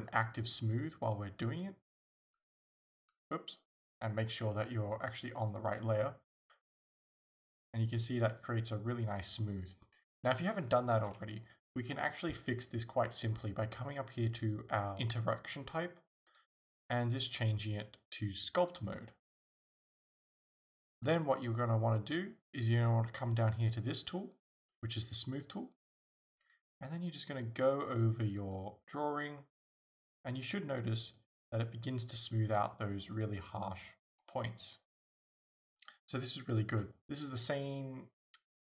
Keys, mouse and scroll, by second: 2.4-5.1 drag, 6.5-25.1 drag, 11.0 ctrl+z, 26.6-38.6 drag.